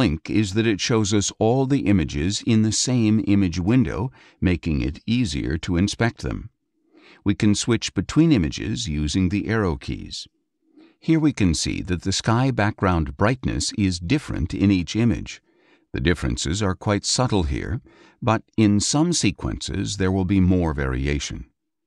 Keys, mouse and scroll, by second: 5.3 click, 7.5 Down, 11.2 Up, 14.6 Down, 16.4 Down.